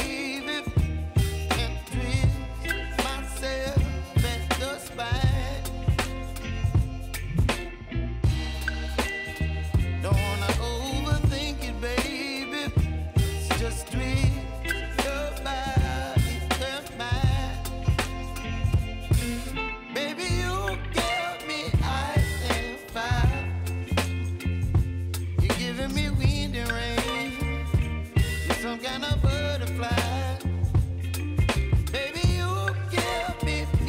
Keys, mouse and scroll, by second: 0.3 u, 2.1 click, 2.8 k, 4.2-5.5 drag, 7.6 space, 9.3 j, 10.8-14.1 drag, 14.1 [, 15.3 click, 16.4 s, 17.2 click, 17.8 Return, 18.8 click, 19.1 k, 20.4-24.4 drag, 24.4 j, 25.0 space, 26.1 j, 26.5 click, 27.7 F9, 28.4-29.8 drag, 31.6 =, 32.0 =, 32.5-33.8 drag.